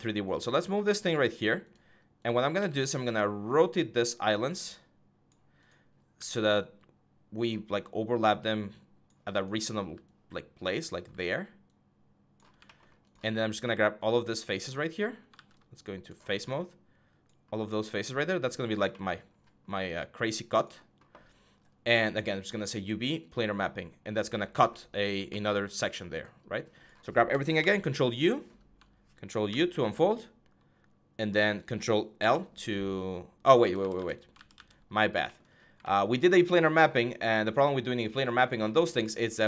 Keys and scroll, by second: 2.1-3.2 typing, 5.9 w, 9.5 w, 10.7 e, 15.1 ctrl+z, 27.3 ctrl+u, 29.2 ctrl+u, 31.9 ctrl+i, 33.4 ctrl+z, 34.1 ctrl+z, 34.3 ctrl+z.